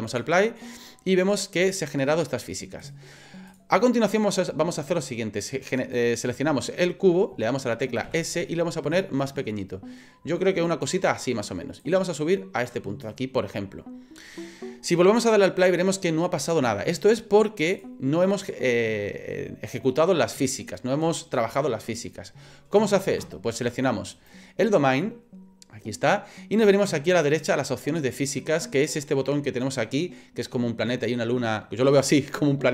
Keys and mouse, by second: 0.1 click, 2.8 click, 3.5 click, 5.8 right click, 8.1 s, 11.8-13.1 drag, 15.6 click, 17.7 click, 24.1 right click.